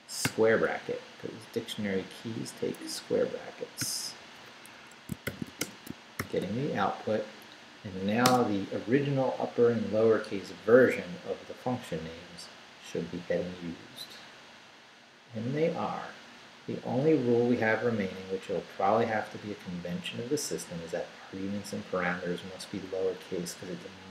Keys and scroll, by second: 0.2 [, 0.7 Right, 3.8 ], 4.7 Escape, 5.0-6.2 typing, 6.9 shift+Up, 8.2 Return.